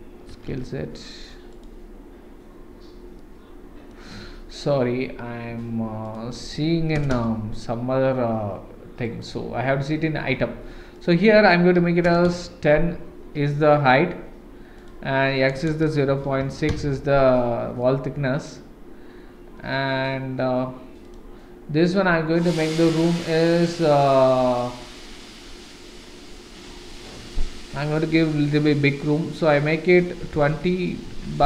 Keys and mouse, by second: 0.3 s, 3.2-3.9 middle drag, 6.2-7.7 drag, 11.1-12.8 drag, 14.8-17.2 drag, 17.8-18.4 middle drag, 21.0 click, 21.9-23.2 drag, 23.6-25.0 middle drag, 26.0-31.4 drag.